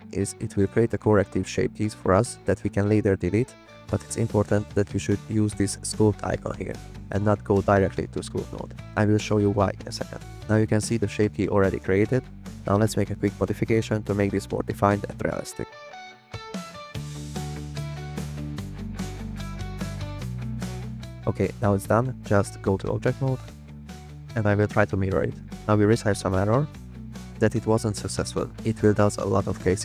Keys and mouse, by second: 7.9-8.9 drag, 11.6 f, 11.8 click, 12.7 click, 13.1 f, 13.1 click, 13.8 click, 14.0 f, 14.1 click, 15.8 f, 15.9 click, 16.5 click, 17.9 click, 18.0 middle click, 19.4 click, 21.7-22.2 drag, 26.9 click.